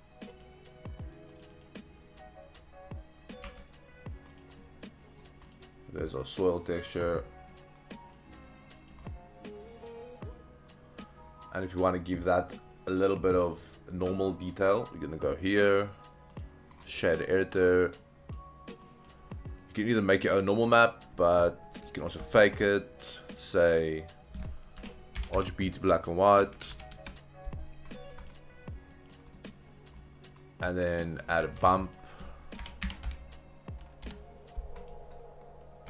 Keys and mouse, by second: 3.5 Tab, 4.6-5.3 middle drag, 6.3 click, 7.0-7.5 middle drag, 8.2 click, 9.1-10.7 middle drag, 15.6-16.5 drag, 17.4 middle click, 18.0-18.4 drag, 18.8 drag, 19.5 middle drag, 20.1 click, 20.8 click, 22.2 shift+a, 26.5 Down, 26.7 Down, 28.9 drag, 29.5 middle drag, 30.0-30.3 drag, 30.6-31.1 drag, 31.4 shift+a.